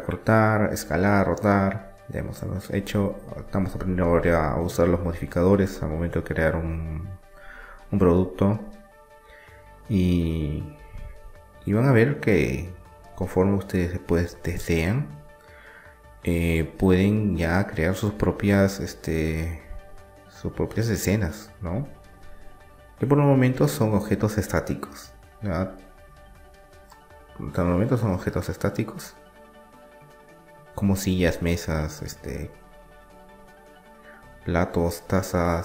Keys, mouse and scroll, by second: 3.0-4.9 middle drag, 4.2 ctrl+r, 10.3 ctrl+e, 13.6 ctrl+r, 18.7 ctrl+r, 23.3 ctrl+r, 27.3-30.0 right drag, 28.7-30.7 drag, 31.0-34.3 middle drag, 34.3-35.6 drag.